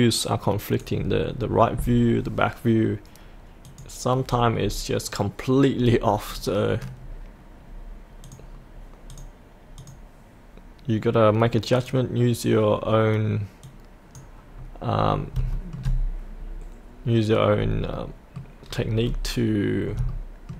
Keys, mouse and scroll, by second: 2.2-3.7 scroll up 1, 3.7 click, 4.2-4.6 scroll up 1, 8.2-14.5 drag, 14.5 scroll up 1, 15.5 shift+middle click, 16.3-17.8 scroll up 1, 17.9 middle click, 18.6-20.0 scroll down 1, 20.1 shift+middle click.